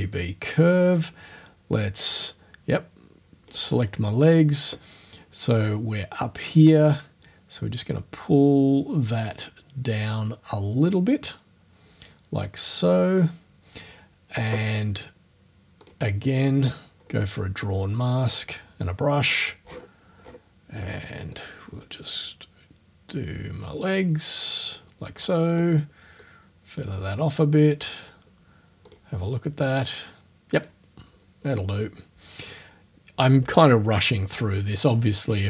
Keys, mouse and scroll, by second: 0.5 click, 2.3-3.6 drag, 6.4-9.5 drag, 15.8 click, 17.0-17.4 scroll down 2, 18.3 click, 19.1-19.5 scroll up 1, 19.6-20.0 scroll down 1, 20.2-20.5 scroll down 1, 21.4-25.0 drag, 26.2 click, 28.0-28.3 scroll down 1, 28.9 click, 30.6 click.